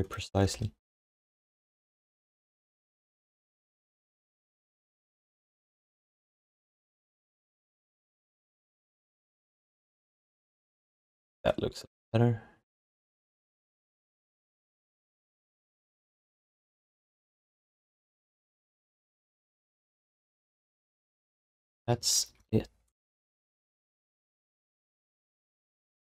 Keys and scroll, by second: 0.9 ctrl+h, 9.7 q, 16.5 alt+shift+d, 16.9-18.0 typing, 19.3 ctrl+shift+d, 21.9 alt+shift+d, 22.3 ctrl+s.